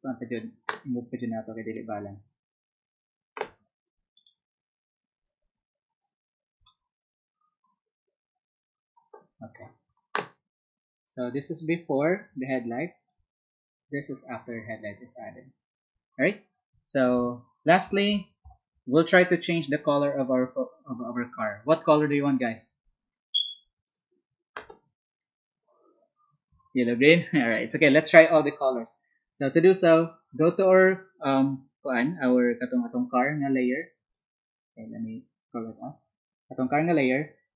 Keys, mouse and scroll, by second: 6.0-8.9 ctrl+drag, 9.5 ctrl+click, 11.3 ctrl+click, 13.0 ctrl+click, 23.1 scroll down 1, 23.8 ctrl+click, 34.1-35.7 ctrl+drag.